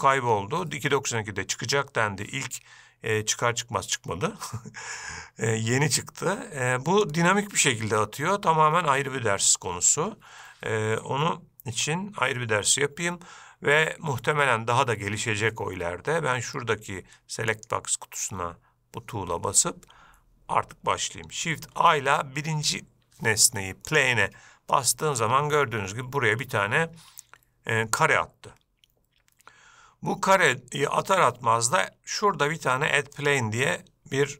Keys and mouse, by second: 11.9 Escape, 21.9 shift+a, 24.9-30.5 middle drag, 33.3 click.